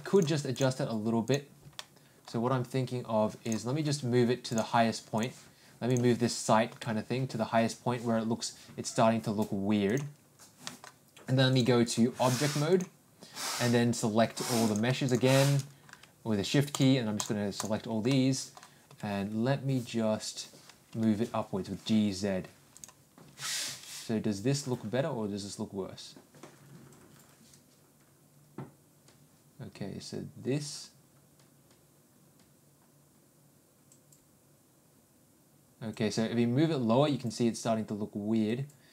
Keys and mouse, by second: 0.2 click, 1.8-2.2 middle drag, 4.6 click, 6.7 g, 10.6 middle click, 11.5 click, 11.8-12.9 drag, 16.7 ctrl+click, 18.1 middle click, 18.9 g, 23.4 g.